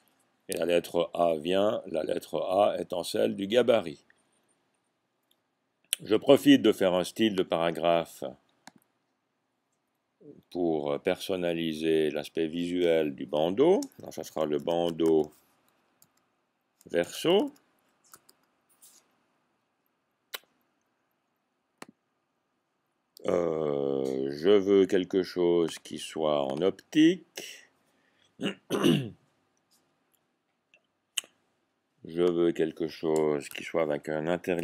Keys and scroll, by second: 14.4-16.0 typing, 17.0-18.6 typing, 33.4 1.